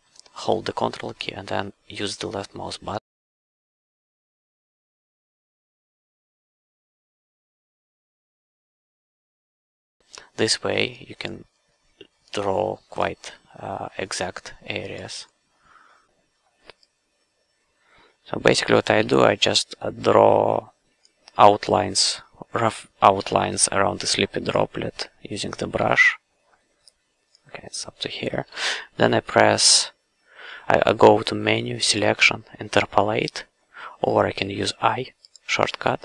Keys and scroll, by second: 19.0 f, 19.4 q, 23.2 f, 25.8 f.